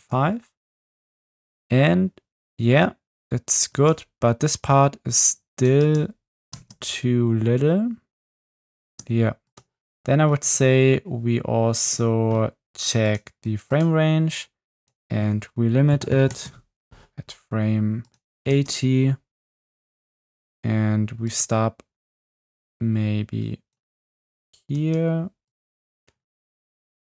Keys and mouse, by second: 0.0 space, 3.7 space, 4.5 drag, 5.8 space, 6.5 space, 8.8 space, 13.1 click, 13.7 click, 14.8-16.4 drag, 18.5 space, 19.7 space, 23.8 space, 24.8 space, 25.5 click, 26.9 click.